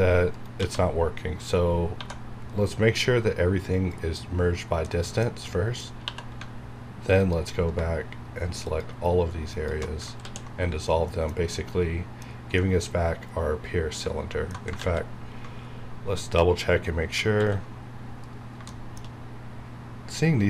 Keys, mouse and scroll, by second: 0.3 right click, 0.6 a, 1.9 1, 2.5 right click, 3.8 click, 4.5 scroll down 1, 4.8 middle click, 5.6 scroll down 1, 6.0 2, 7.2 alt+click, 10.1 ctrl+x, 10.5 scroll down 1, 10.8-14.8 middle drag, 14.8 ctrl+z, 15.6-16.0 scroll up 1, 17.3 ctrl+x, 17.9-18.5 scroll down 1, 18.7 shift+middle click.